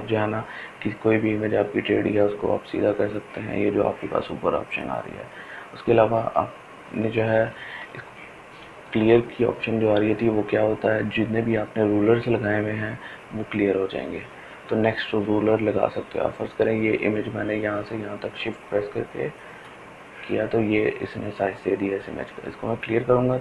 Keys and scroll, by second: 7.4 ctrl+alt+z, 8.1 ctrl+alt+z.